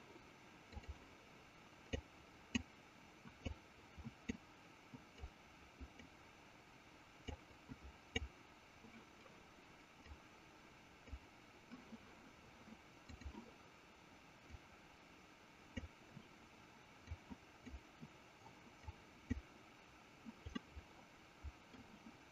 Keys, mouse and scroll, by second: 0.6 click, 2.3 click, 4.0 click, 5.6 click, 7.7 click, 10.4 click, 13.1 click, 14.9-16.1 drag, 17.5 click, 19.3 click, 20.9 middle click.